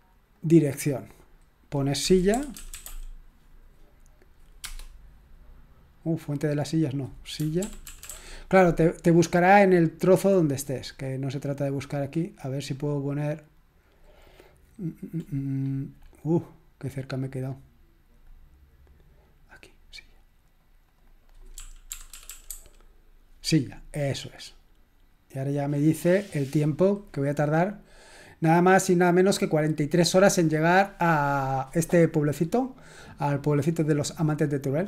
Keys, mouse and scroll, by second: 0.4 click, 1.8-3.3 typing, 4.7 Return, 6.6 click, 7.2-8.5 typing, 9.2 click, 9.9-11.0 scroll down 1, 11.0-11.7 scroll up 1, 12.7-14.0 drag, 15.2-16.2 scroll up 1, 16.2-16.9 scroll down 1, 17.6-18.3 scroll up 2, 18.3-19.6 drag, 20.4 click, 20.9 click, 21.3-23.0 typing, 24.3 click.